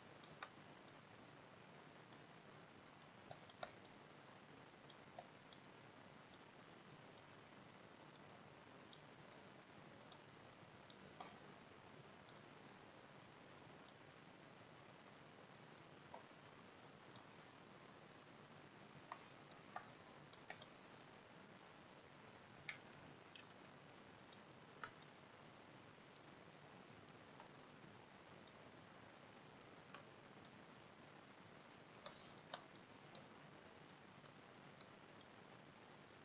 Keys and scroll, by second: 22.9 ctrl+z.